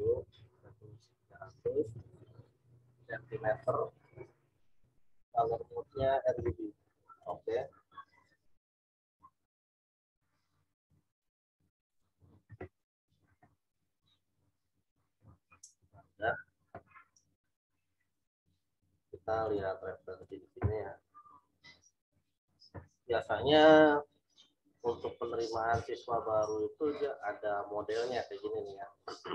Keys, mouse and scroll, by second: 0.7 click, 2.9 click, 7.2 click, 10.8 click, 14.3 click, 19.4 click, 20.2 click, 26.9 click.